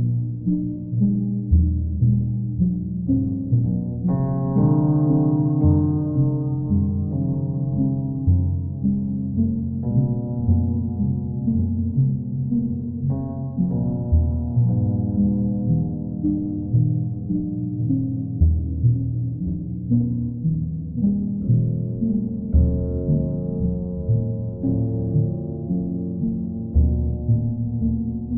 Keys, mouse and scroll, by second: 0.1 click, 3.3 click, 3.6 shift+click, 6.0 click, 9.5 click, 11.8 click, 13.2 click, 13.6 ctrl+z, 14.6 click, 15.1 click, 15.3 shift+click, 15.4 shift+click, 16.3 shift+click, 17.0 ctrl+click, 18.3 click, 18.8 click, 19.2 shift+click, 20.0 shift+click, 23.4 click, 26.3 click, 27.7 click.